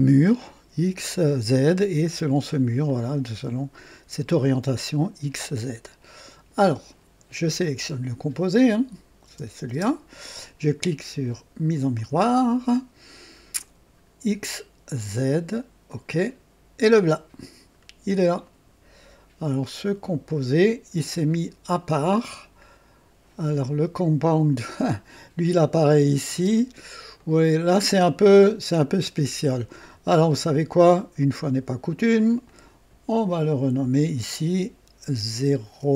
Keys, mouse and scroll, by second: 2.8-6.7 drag, 7.5 click, 9.2 space, 9.4 space, 9.7 space, 11.9 click, 13.5 click, 14.9 click, 15.9 click, 17.5-17.8 scroll down 1, 20.2 click, 21.0 scroll down 1, 23.3 click, 26.3 space, 27.1 click, 32.4 click, 33.7 F2, 35.7 KP_0.